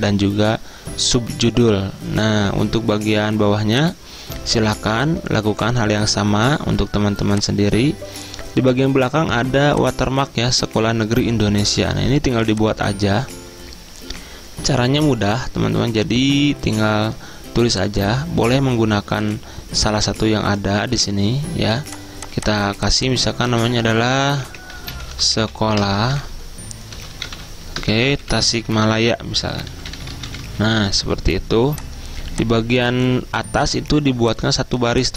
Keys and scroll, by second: 23.6 ctrl+a, 24.5 Caps_Lock, 24.6-31.4 typing.